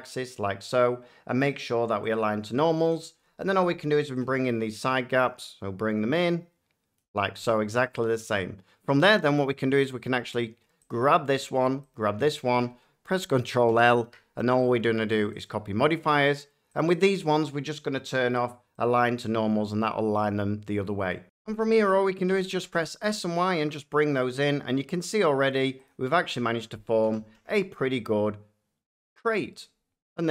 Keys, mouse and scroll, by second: 0.2 click, 2.0 click, 6.9 click, 10.8 click, 11.8 shift+click, 13.6 ctrl+i, 15.3 click, 16.7 click, 18.7 click, 21.2 F9, 22.2-22.5 typing, 24.3 click, 25.4 middle click, 25.8 click, 27.0 s, 27.3 x, 29.1 click.